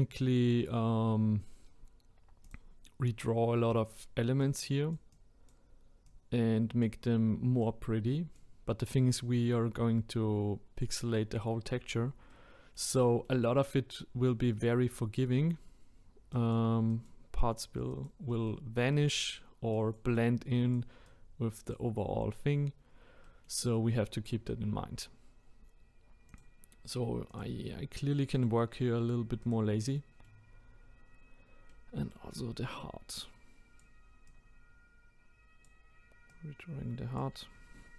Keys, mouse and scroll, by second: 0.0-2.4 scroll up 2, 2.4-8.7 drag, 8.7-9.3 scroll down 7, 9.3-9.8 middle drag, 9.8-10.6 scroll up 1, 10.6-11.7 scroll down 1, 11.7-12.3 scroll down 1, 12.3-14.1 middle drag, 14.1-14.7 scroll up 2, 14.7 middle click, 15.1-15.5 scroll up 1, 15.5-16.3 scroll down 1, 16.3-18.3 drag, 18.3-19.7 middle drag, 19.7-22.8 drag, 22.8-23.2 scroll down 1, 23.2-23.7 middle drag, 23.7-24.5 scroll up 4, 24.5-25.6 scroll down 1, 26.3-27.4 drag, 29.9-30.5 middle drag, 30.5-31.0 scroll up 1, 31.1-31.7 scroll up 1, 31.7-33.2 middle drag, 33.2-37.9 drag.